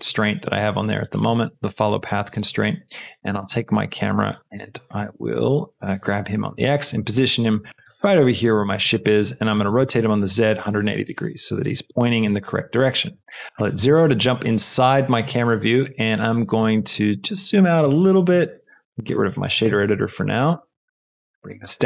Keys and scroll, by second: 5.9 shift+g, 6.1 x, 7.7 g, 9.6 r, 9.7 z, 10.5 KP_1, 10.7 KP_8, 10.8 Return, 13.8 KP_0.